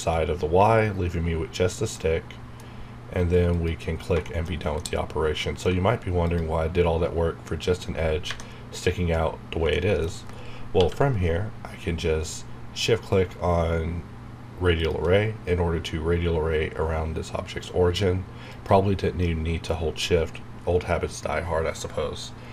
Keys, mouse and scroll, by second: 1.9-3.5 middle drag, 3.5 click, 4.2 shift+middle click, 4.5 scroll up 1, 4.8-8.4 middle drag, 6.2 click, 9.7 shift+middle click, 9.9 shift+scroll down 1, 10.8 q, 13.2 q, 14.8 shift+click, 15.4 scroll down 1, 18.5 click.